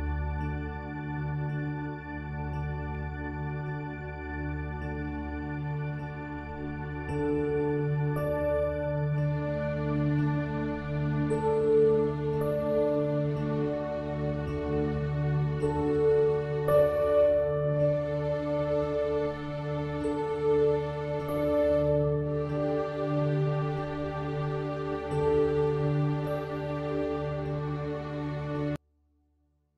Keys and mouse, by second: 21.3 click.